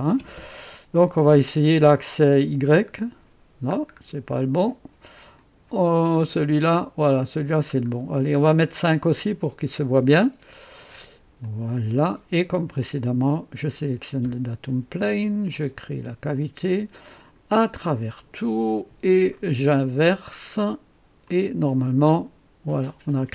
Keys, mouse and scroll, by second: 2.3 click, 3.3 scroll down 2, 3.8 scroll up 2, 4.4 scroll up 2, 5.4 click, 6.4 scroll down 2, 7.4-8.2 scroll down 4, 9.3 scroll up 2, 11.4 click, 13.2 click, 15.5 click, 17.1 click, 17.8 click, 19.3 click, 21.2 click, 22.1-23.1 drag.